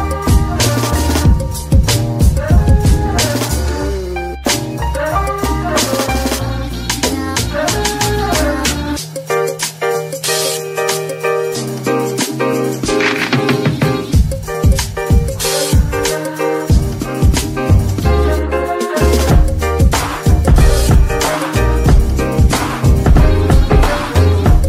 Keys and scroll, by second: 3.8 g, 4.5 Tab, 5.1 shift+s, 6.0 z, 6.9 Tab, 7.3 shift+s, 9.3 shift+s, 10.4 ctrl+KP_3, 11.9 g, 15.5 z.